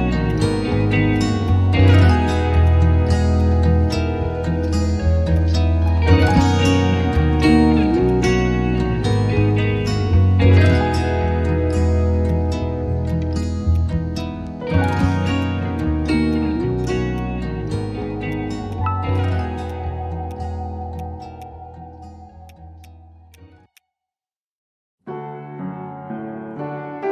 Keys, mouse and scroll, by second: 4.2 ctrl+z, 4.7 ctrl+z, 6.3 ctrl+z, 9.1 shift+click, 17.9 ctrl+s.